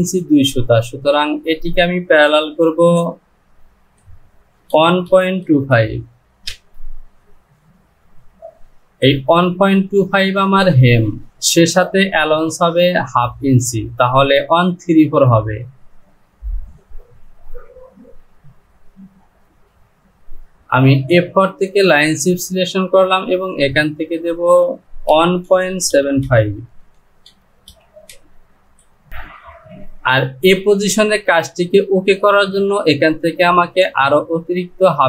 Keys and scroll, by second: 3.8 Down, 24.1 Down, 27.4 KP_Decimal, 27.7 KP_7, 28.1 KP_5, 28.6 Down, 29.1 Return.